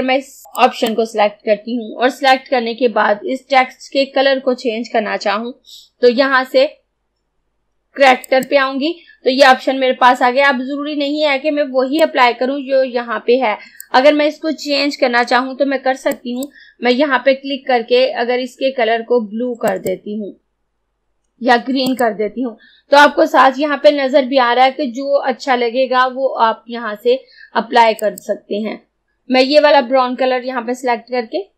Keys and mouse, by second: 0.6-3.6 drag, 8.3 click, 12.1-16.2 drag, 16.2-19.1 drag, 19.7 click, 28.0 click.